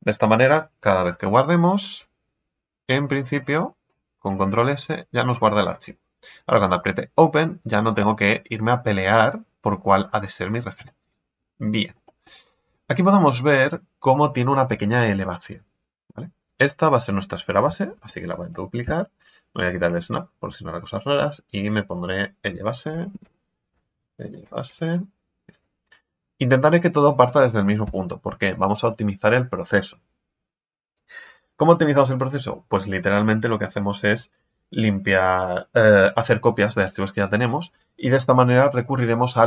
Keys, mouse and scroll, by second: 2.8 ctrl+s, 6.2 click, 8.0 click, 9.0-10.0 scroll down 1, 10.0-10.8 scroll up 1, 10.8-12.5 middle drag, 12.5-15.6 scroll up 1, 17.9 shift+d, 20.1 click, 21.1 click, 21.8 click, 21.9-25.0 drag.